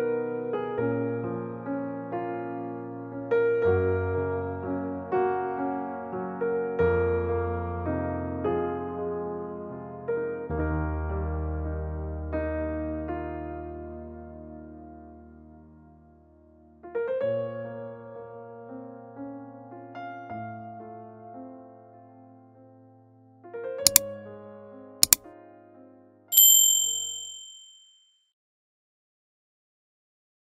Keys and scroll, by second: 4.4 m, 6.6 space, 8.6 space, 8.9 Escape, 9.0 Escape, 12.2 k.